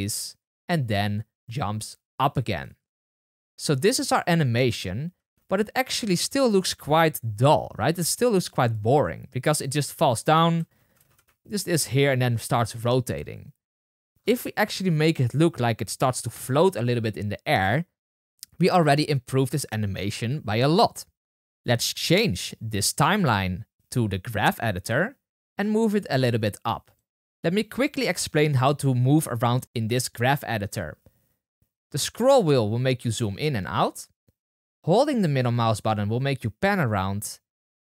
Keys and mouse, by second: 2.6-3.3 space, 3.5 space, 5.1 space, 9.8-11.9 typing, 10.2-21.8 drag, 13.8 space, 24.3-29.4 drag, 29.4-32.1 middle drag, 32.1 click, 32.3 middle click, 32.8 click, 33.4 middle click, 33.6 click, 33.9-37.9 middle drag.